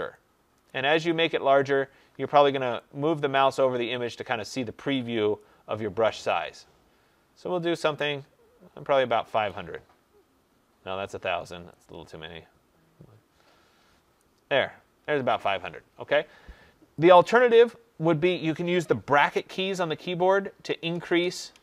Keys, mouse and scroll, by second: 0.6 click, 3.3 click, 5.3 click, 14.1 click, 17.5 click, 19.6 ], 20.6-21.6 typing.